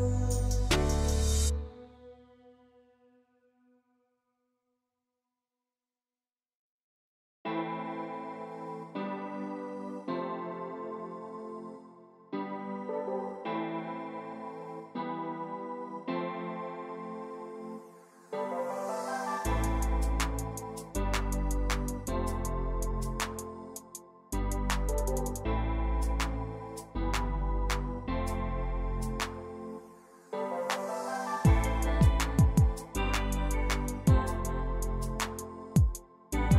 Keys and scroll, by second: 0.3 r, 2.4 d, 4.0-4.7 typing, 6.0 Escape, 9.3 e, 18.7 f, 21.9 2, 22.2 Return, 26.5-27.4 typing, 27.7 Return, 35.3 j.